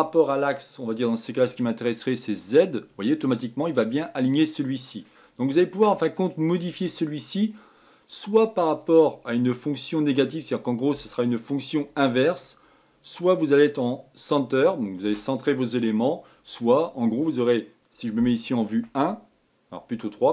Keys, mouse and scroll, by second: 2.3 click, 3.2-6.2 middle drag, 6.5-9.6 drag, 13.1-16.2 drag, 18.7 KP_1, 19.9 KP_3.